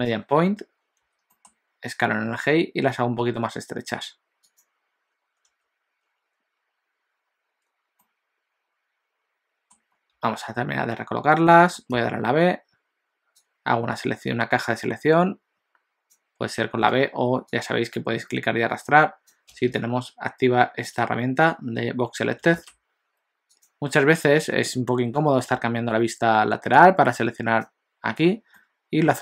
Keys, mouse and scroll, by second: 1.1 s, 5.5 Tab, 8.1 middle click, 11.5 middle click, 12.0 b, 17.0 alt+a, 17.7 click, 23.5 click, 25.4 KP_1, 26.8 click, 28.6 middle click.